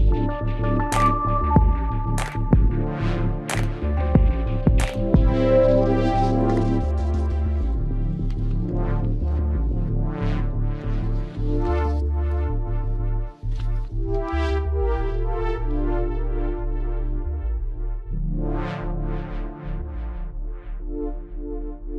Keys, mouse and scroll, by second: 0.1 z, 0.7 right click, 1.0 c, 1.6 middle click, 2.4 right click, 7.8 i, 8.6 z, 8.9 middle click, 9.1-11.6 drag, 11.0 KP_3, 11.3 z, 11.8 c, 13.0-14.6 drag, 14.0 c, 15.2 z, 15.8-17.0 drag, 16.9 KP_3, 17.3 Tab, 17.7 ctrl+s, 18.4 z, 21.0 Tab.